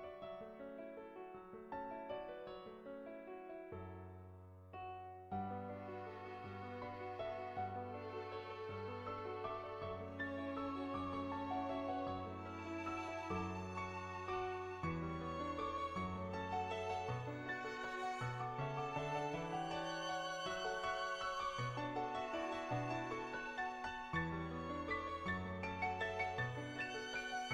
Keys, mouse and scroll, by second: 0.0 n, 1.1 shift+middle click, 1.7 middle click, 14.5 s, 16.6 g, 18.6 r, 20.3 s, 21.8 g, 23.4-24.5 middle drag, 24.8 middle click, 25.4 r, 27.4 g.